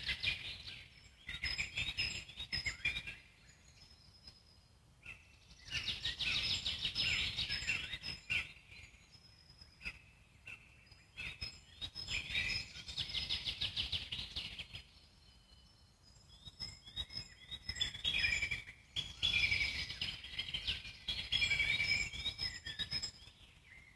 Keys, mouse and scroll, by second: 2.8-4.9 alt+middle drag, 4.9-5.7 scroll up 1, 5.7 click, 6.4-7.7 alt+middle drag, 7.7 g, 9.2-10.9 alt+middle drag, 11.7 ctrl+r, 12.6 s, 13.8-15.2 alt+middle drag, 15.2-15.6 scroll down 2, 15.6 alt+middle click, 16.3 ctrl+r, 18.6-18.9 scroll up 1, 18.9-20.0 alt+middle drag, 20.0 z, 21.4 click, 23.6 z.